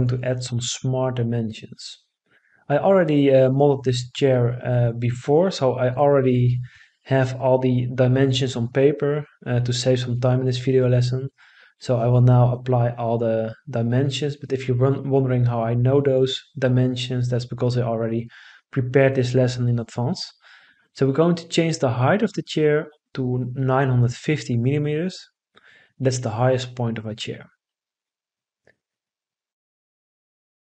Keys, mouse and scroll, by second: 20.3 9, 20.9 5, 21.6 0, 22.2 Return.